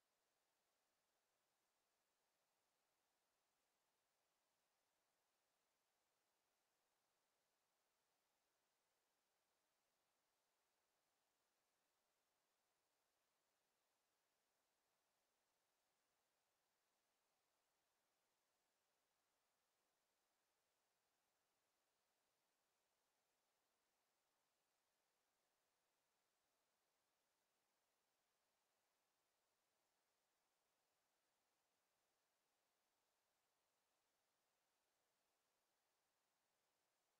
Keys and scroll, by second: 29.1 Delete.